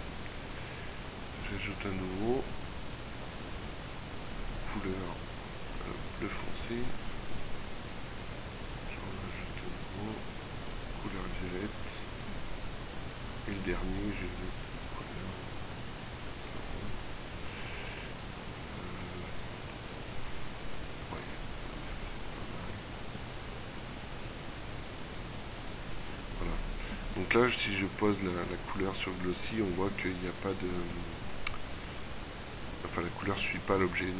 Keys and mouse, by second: 12.7 middle click, 15.6 middle click, 29.7 middle click, 30.9-33.2 middle drag.